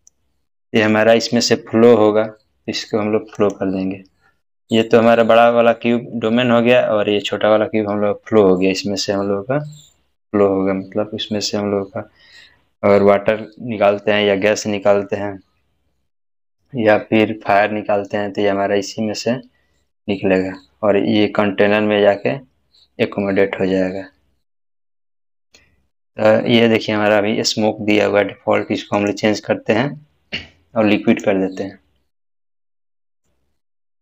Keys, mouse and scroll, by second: 3.4 click, 3.4 click, 29.0 click, 29.0 click, 32.4-33.6 scroll down 1.